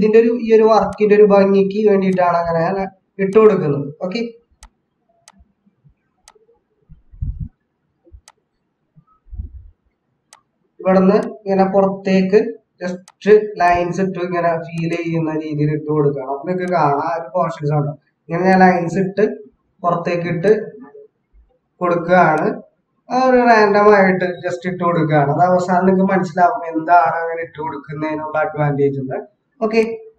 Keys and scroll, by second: 17.3 ctrl+-.